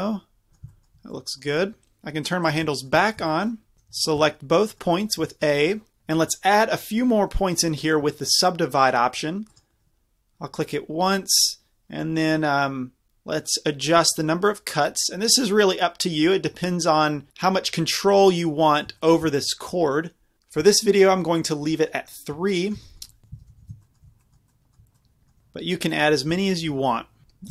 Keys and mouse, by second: 3.7 a, 3.9 a, 9.5-13.1 drag, 13.5 click, 18.5-23.3 middle drag, 23.3 a, 23.5 a, 23.8-27.5 middle drag.